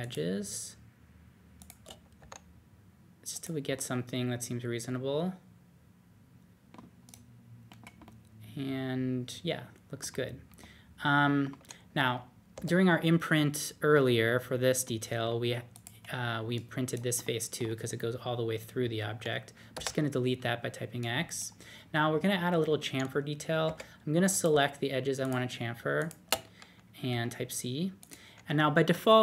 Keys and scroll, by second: 2.1 d, 7.7 alt+z, 12.5 3, 19.5-20.2 typing, 23.6 typing, 27.1 c.